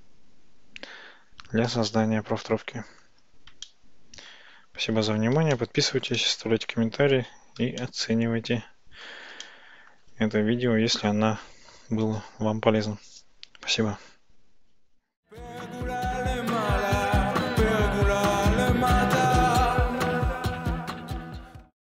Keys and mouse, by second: 1.9-3.1 shift+middle drag, 3.7-4.4 ctrl+middle drag, 5.6-6.7 shift+middle drag, 7.9-9.1 shift+drag, 9.5 middle click.